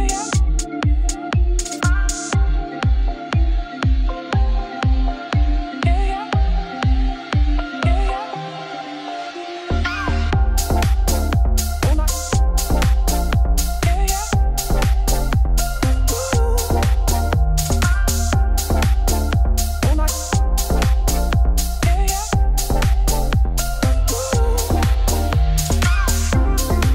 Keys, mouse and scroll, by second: 1.6 alt+click, 2.7-3.9 ctrl+drag, 4.2 shift+click, 4.4 shift+click, 4.7-5.8 shift+drag, 5.8 middle click, 5.9 e, 6.9 KP_Divide, 7.3 Tab, 8.6 ctrl+s, 8.8 click, 9.0 Tab, 9.1 2, 9.2 click, 9.4 shift+d, 9.9 [, 10.0 p, 10.3 Tab, 10.6-12.0 drag, 12.0 Tab, 12.2 1, 12.4 click, 12.5 middle click, 13.1 click, 13.9 middle click, 14.5 g, 15.6 click, 15.9 g, 18.4 2, 18.5 click, 18.6 e, 20.5 ctrl+r, 22.0 KP_7, 22.5 g, 23.5 middle click, 23.7-26.5 typing, 25.3 click, 25.6 click.